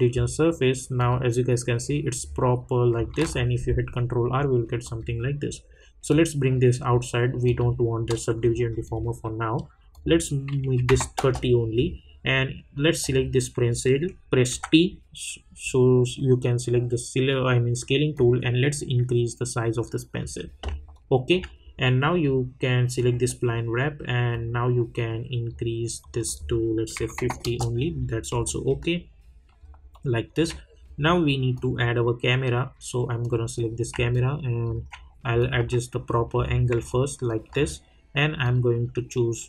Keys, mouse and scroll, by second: 1.8 scroll down 1, 3.2 ctrl+r, 4.8-7.4 drag, 11.1 Return, 13.0 click, 14.5 t, 18.1-20.9 drag, 20.9-26.0 alt+drag, 27.4 Return, 28.0 scroll down 1, 28.4-29.9 alt+drag, 29.9-31.5 alt+middle drag, 31.5 click, 34.1 alt+click, 35.5 s, 36.0 scroll down 1, 36.9-38.4 alt+drag.